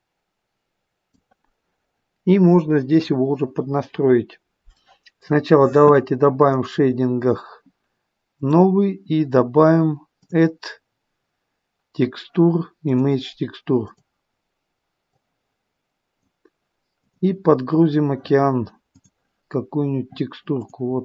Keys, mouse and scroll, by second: 4.8 middle click.